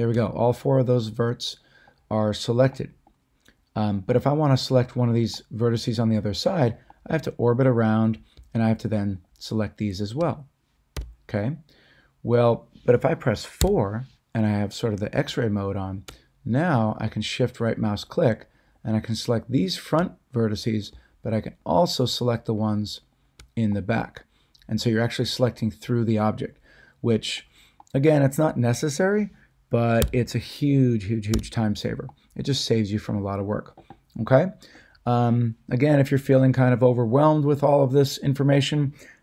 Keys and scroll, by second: 10.9 a, 13.6 4, 30.0 4, 31.3 a.